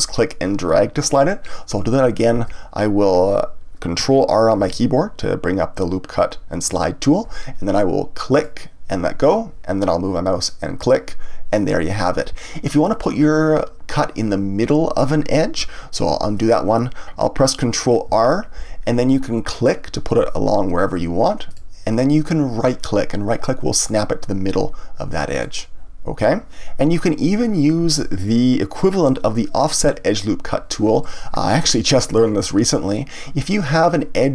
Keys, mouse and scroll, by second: 2.3 ctrl+z, 4.6 ctrl+r, 10.8 click, 16.2 ctrl+z, 18.1 ctrl+r, 25.4 right click, 28.2-31.0 drag, 32.2-34.3 scroll up 1.